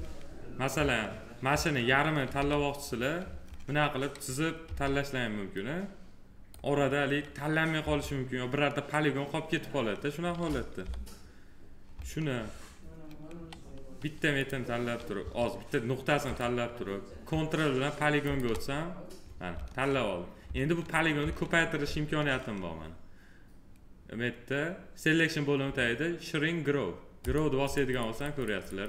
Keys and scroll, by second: 2.1 f, 4.4 4, 7.6 F3, 10.6 p, 15.0 1.